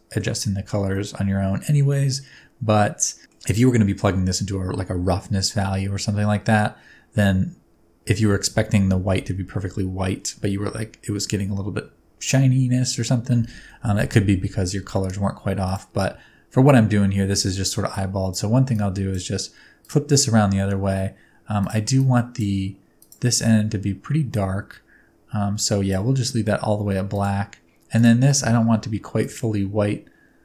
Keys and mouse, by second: 1.0-3.4 middle drag, 13.6 middle click, 17.9-18.3 drag, 18.7-19.1 drag, 19.9 drag, 21.6 click, 22.0-22.4 drag, 23.0 right click, 27.2 right click.